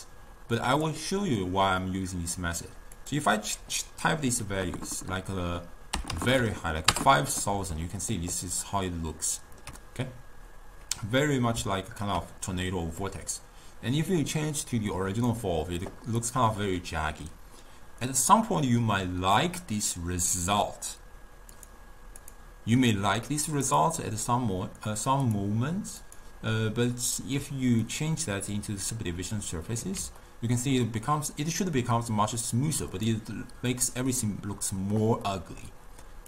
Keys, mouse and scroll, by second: 0.0 drag, 1.9 scroll up 1, 1.9-3.0 middle drag, 3.0 click, 3.4-6.3 drag, 6.3 0, 6.5 0, 8.1-11.1 ctrl+middle drag, 11.4-13.1 middle drag, 13.1 click, 16.2 click, 21.6 click, 22.3 click, 23.7 click, 25.3 click, 30.3-33.0 ctrl+middle drag, 33.0 click, 35.3-36.2 middle drag.